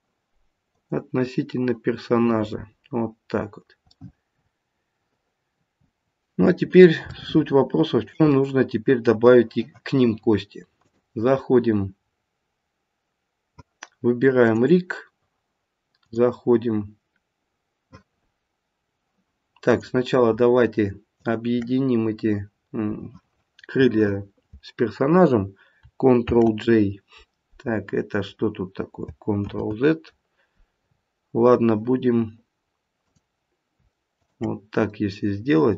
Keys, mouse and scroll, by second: 3.9 middle click, 6.1 middle click, 6.4 middle click, 7.1 shift+middle click, 8.0 shift+middle click, 8.3 middle click, 10.7 click, 14.4 click, 16.0 click, 18.1-18.7 scroll up 1, 18.7-19.1 scroll down 1, 19.7 click, 21.1 shift+click, 26.2 ctrl+j, 27.6-29.0 scroll down 4, 29.4 ctrl+z, 32.5-33.0 scroll up 3, 33.0 click, 34.1 shift+click.